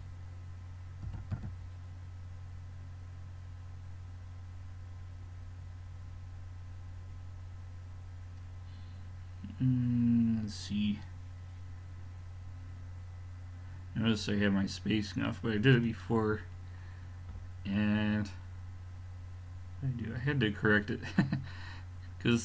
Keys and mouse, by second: 1.1 g, 17.3-22.4 middle drag.